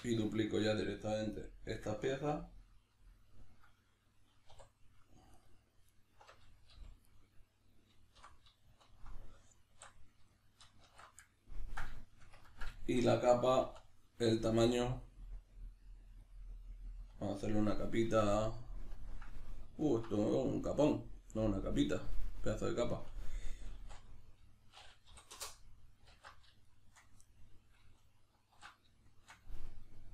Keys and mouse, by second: 0.3 right click, 0.9-5.3 middle drag, 4.5 2, 5.3 alt+right click, 5.9 alt+right click, 6.7 g, 7.2 right click, 8.2 o, 9.8 alt+q, 10.3-13.7 shift+middle drag, 10.9 alt+q, 13.7 e, 16.3 click, 18.2 ctrl+middle click, 19.5 middle click, 19.8 ctrl+middle click, 20.4 middle click, 23.7 s, 26.7 shift+middle click, 27.3 middle click, 28.0 alt+q, 29.1-30.1 shift+middle drag.